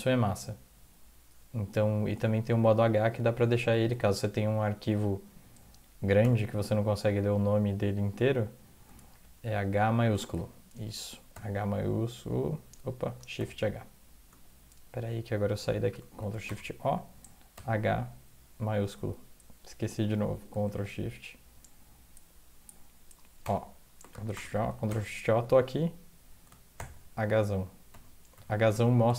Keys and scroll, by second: 3.9 alt+Tab, 6.2 h, 9.0 alt+Tab, 10.2 alt+Tab, 11.3 ctrl+h, 13.3 shift+h, 16.2 ctrl+x, 16.4-18.0 typing, 20.6 ctrl+x, 23.4 o, 24.1 ctrl+x, 24.3 o, 24.7 ctrl+x, 24.9 o, 26.5-28.8 typing.